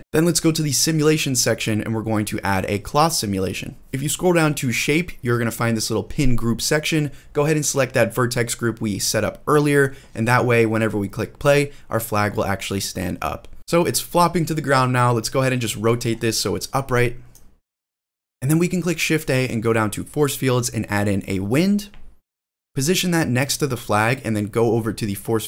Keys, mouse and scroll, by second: 0.1 click, 1.2 click, 3.0 click, 3.8 click, 3.8 scroll down 5, 4.4 scroll down 2, 5.1 click, 8.4-8.9 drag, 9.2 space, 11.9-13.6 middle drag, 13.6 space, 13.8 click, 14.8 click, 16.0 ctrl+z, 16.4 middle click, 17.2 click, 18.2 shift+middle click, 18.9 shift+a, 22.0 click, 22.0 middle click, 22.0-22.4 scroll down 1, 22.0 g, 22.6 drag, 22.9 scroll up 2, 23.3-23.7 middle drag, 23.8 shift+middle drag, 24.2-25.0 scroll up 2, 25.0-25.4 middle drag.